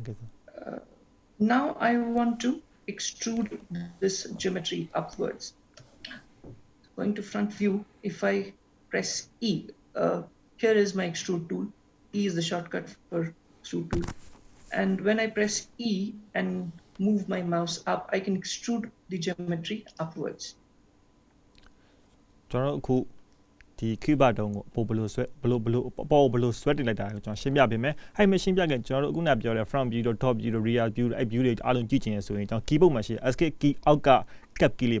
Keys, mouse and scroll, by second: 12.2 e, 25.8 middle click.